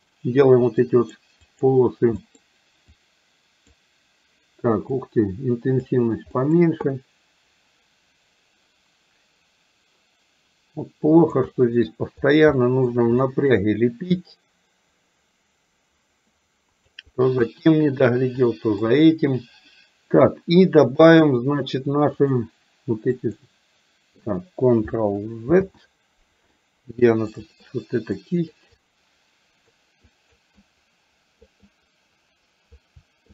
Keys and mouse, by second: 0.9 click, 1.5 click, 2.3 middle click, 3.0 click, 5.0 click, 6.5 middle click, 6.9-11.4 drag, 11.5 middle click, 12.6 shift+middle click, 13.4 middle click, 14.1-17.0 drag, 17.5 shift+middle click, 18.5 middle click, 22.3 click, 23.3 click, 25.6 ctrl+z, 27.3 click, 28.3 click, 28.8-29.8 drag, 30.1 click, 30.6 click, 31.6-32.8 drag.